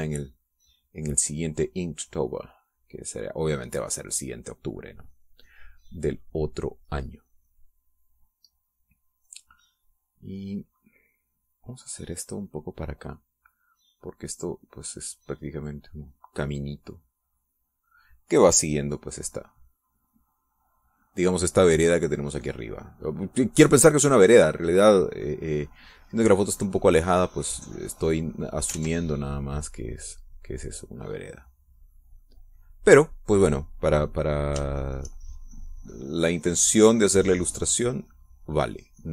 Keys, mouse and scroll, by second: 0.1 shift+click, 0.9-2.2 shift+drag, 2.3 shift+click, 3.2-5.0 drag, 5.0 click, 5.6 click, 8.1 middle click, 10.3 middle click, 11.9-19.1 drag, 19.8 click, 20.2 click, 20.7 click, 21.1 click, 23.5 click, 28.6 click, 29.6 ctrl+z, 29.9-32.7 ctrl+drag, 33.0-34.0 middle drag, 35.5 shift+click, 36.0-39.1 shift+drag.